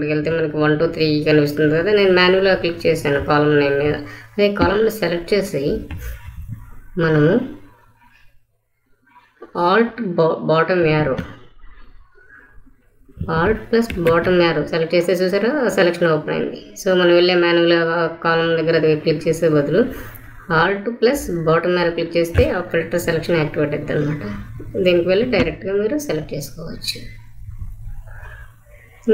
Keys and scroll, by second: 13.8 alt+Down.